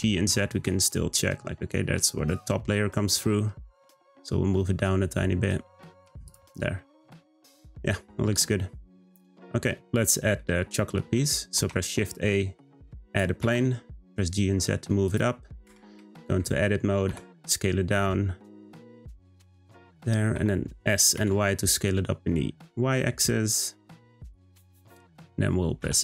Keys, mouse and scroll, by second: 6.3 click, 6.6 scroll down 1, 6.7-11.6 middle drag, 11.6 shift+a, 13.1 g, 15.7 Tab, 16.1-17.1 shift+middle drag, 17.1 s, 20.3 s, 25.8 e.